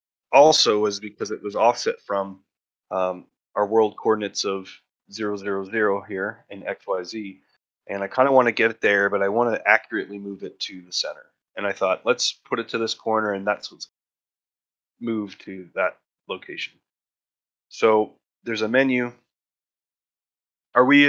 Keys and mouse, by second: 0.5 middle click, 0.7 shift+middle drag, 17.4 shift+middle drag, 18.2 shift+middle drag.